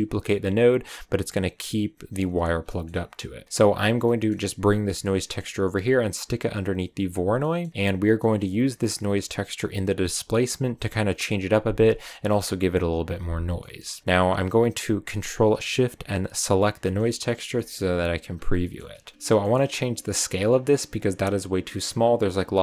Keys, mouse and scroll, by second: 1.3 click, 2.6 middle click, 3.0 click, 3.4 click, 4.0 middle click, 4.5 click, 5.1-6.4 middle drag, 6.4 click, 7.3 scroll up 1, 7.3-11.1 middle drag, 13.5-16.2 middle drag, 16.5 ctrl+shift+click, 16.9-17.5 scroll down 1, 17.5-18.9 shift+middle drag, 18.9-19.3 scroll up 2, 19.3-20.7 middle drag, 20.7-21.6 scroll up 3, 22.5-22.6 scroll down 1.